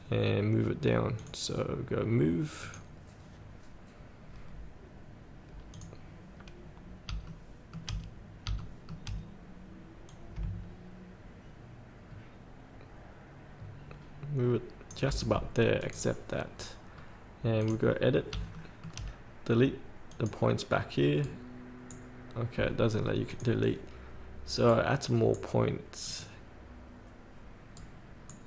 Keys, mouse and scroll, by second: 7.4 shift+middle click, 8.4 scroll up 1, 8.7 shift+middle click, 9.3 scroll down 1, 10.3-15.3 drag, 17.2 scroll up 1, 17.8 click, 18.7 shift+middle click, 18.9 shift+scroll, 20.3-21.4 drag, 21.4-22.4 right drag, 23.5-24.5 drag, 24.9 right click, 26.3 click, 27.9 right click.